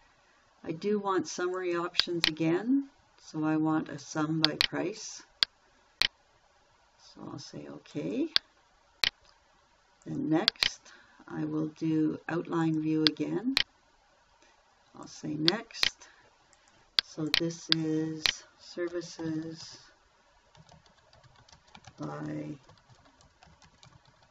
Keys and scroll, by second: 19.4-24.3 typing.